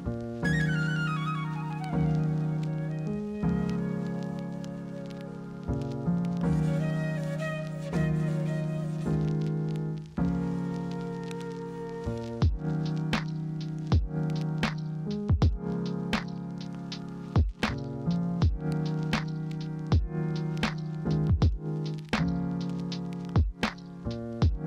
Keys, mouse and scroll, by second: 7.3 ctrl+z, 11.6 ctrl+z, 16.8 ctrl+alt+2, 18.2 ctrl+c, 18.4 ctrl+f, 24.1 ctrl+z.